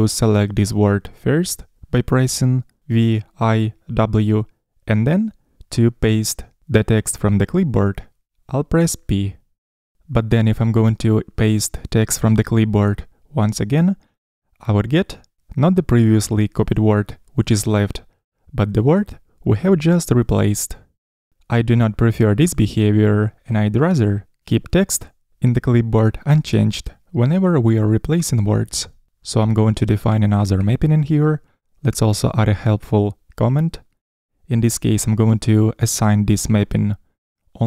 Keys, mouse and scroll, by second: 3.1 typing, 9.6 p, 19.7 p.